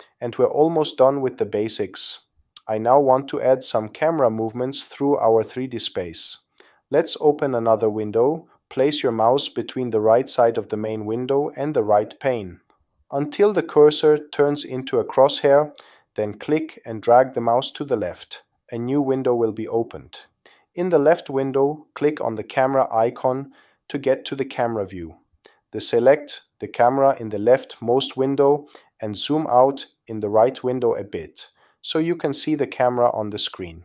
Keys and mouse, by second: 1.9 n, 14.6 click, 14.7 middle click, 15.2 middle click, 15.7 middle click, 16.6 click, 17.5 click, 17.6 middle click, 17.7 click, 19.3 click, 21.9 click, 31.2 click, 32.8 click, 33.3-33.8 drag.